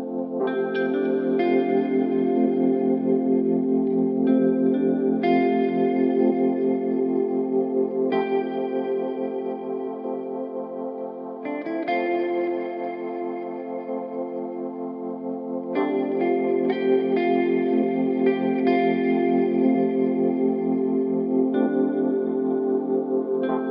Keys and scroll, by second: 11.3 ctrl+z, 12.6 ctrl+z, 18.4 ctrl+z.